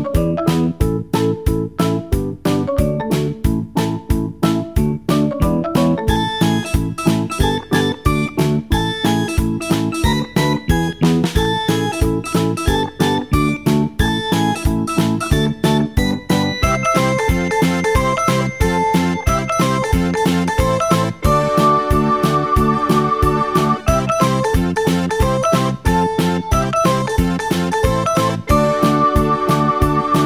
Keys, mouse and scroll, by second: 4.4 click, 7.4 shift+click, 15.7 click, 17.8-20.3 drag, 20.4-23.5 drag.